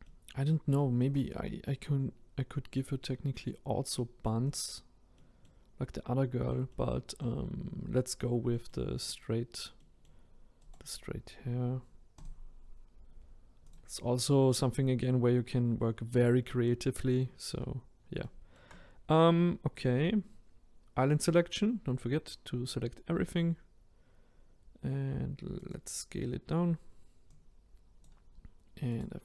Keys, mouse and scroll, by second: 0.0-12.2 middle drag, 12.2-13.7 right drag, 13.7 click, 23.1 s, 27.4 click.